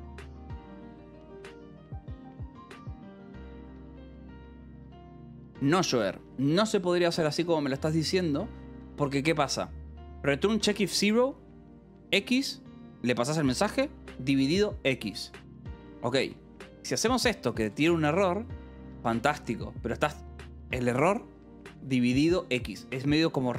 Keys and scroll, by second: 6.7 Escape, 15.5 Escape, 16.6 j, 18.1 shift+v, 21.9 Escape.